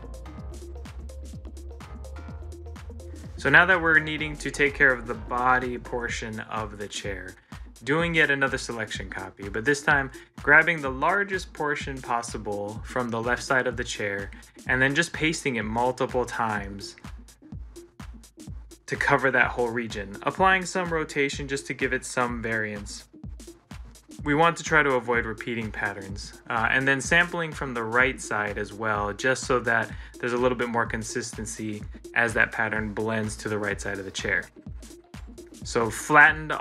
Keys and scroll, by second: 3.0 ctrl+c, 3.9 ctrl+z, 6.3 ctrl+c, 6.7 ctrl+l, 8.0 ctrl+v, 10.4 ctrl+v, 11.4 ctrl+v, 15.0 ctrl+v, 22.8 ctrl+c, 23.1 ctrl+l, 24.6 ctrl+v, 25.6 ctrl+v, 26.2 ctrl+v, 28.2 ctrl+c, 28.3 ctrl+v, 34.4 ctrl+z, 36.2 ctrl+z.